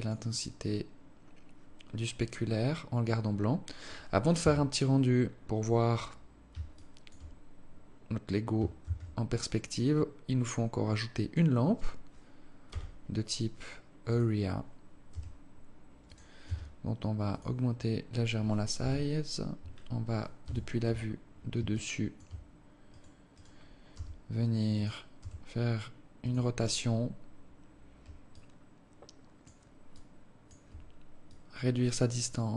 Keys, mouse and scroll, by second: 2.9-4.0 scroll down 2, 4.0 KP_3, 4.9-5.3 scroll down 4, 6.4 alt+shift+click, 7.7 scroll up 1, 8.5 shift+a, 12.3 g, 14.7 r, 16.1 s, 18.4 KP_7, 20.1 KP_7, 20.7-21.3 scroll down 3, 21.3 alt+shift+click, 22.5 right click, 23.1 right click, 23.5 g, 24.9 r, 28.0 alt+click, 29.5 alt+click, 30.9 click.